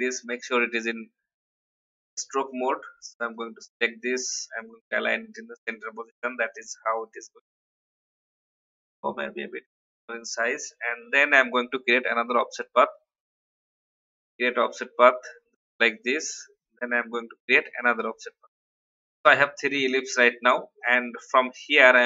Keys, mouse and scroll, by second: 0.3 shift+v, 1.3-2.1 shift+scroll up 1, 2.5 shift+click, 3.3 click, 8.2 shift+click, 11.2 ctrl+alt+f, 12.1 click, 13.7 scroll up 1, 15.9 click, 17.3 ctrl+alt+f, 18.0 click, 20.2 v, 20.8 click.